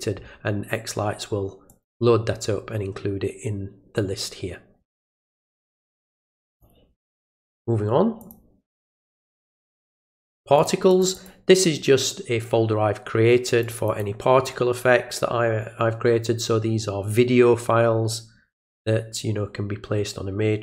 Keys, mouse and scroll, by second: 1.7 click, 6.5 click, 8.2 click, 10.6 click, 10.9 click, 11.1 click, 13.6 click, 13.9 click, 18.5 click.